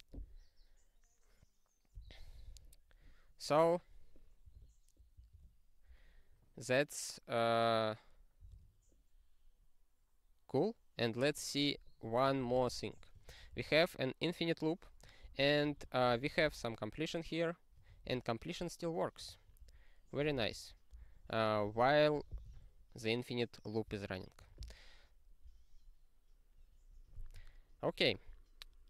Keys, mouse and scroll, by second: 2.4 ctrl+e, 5.3 ctrl+g, 8.5 ctrl+e, 10.7-11.2 scroll up 1, 11.8 click, 12.0 click, 12.4 ctrl+n, 12.5 ctrl+n, 12.7 ctrl+n, 13.2 ctrl+n, 13.7 ctrl+e, 15.2 Return, 15.4-18.7 typing, 19.4 ctrl+a, 19.6 ctrl+space, 20.3 ctrl+g, 20.5 ctrl+a, 21.1 ctrl+b, 21.6 ctrl+space, 21.8 ctrl+n, 22.1 ctrl+w, 22.6 ctrl+s, 24.4 ctrl+g, 26.0-28.8 scroll down 50.